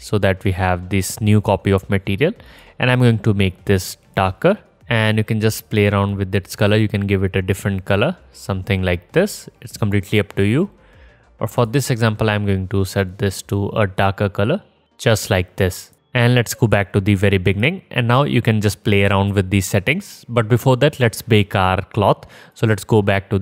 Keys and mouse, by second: 0.7 click, 0.7 right click, 1.5 click, 1.5 right click, 1.6 drag, 1.6 right drag, 3.1-6.4 drag, 3.1 right click, 6.4 right click, 6.9-8.2 drag, 8.2-11.1 right drag, 11.1 click, 11.9 right click, 12.5-15.8 drag, 14.3 middle click, 14.3 right click, 15.8-18.6 middle drag, 18.6-23.4 drag.